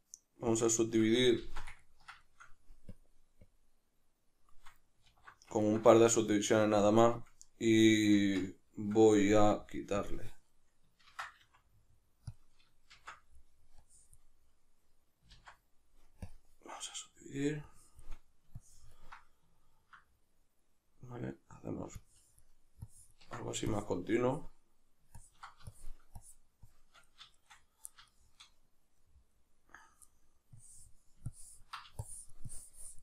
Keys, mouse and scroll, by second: 1.4 ctrl+z, 1.8-3.0 ctrl+middle drag, 3.0-5.6 drag, 5.1 alt+q, 5.6-10.0 ctrl+shift+middle drag, 8.2 Tab, 10.0 click, 11.1 ctrl+c, 11.4 f, 12.3 click, 12.9 shift+c, 13.8-27.4 drag, 15.3 ctrl+z, 27.4-30.6 shift+middle drag, 30.6-33.0 drag.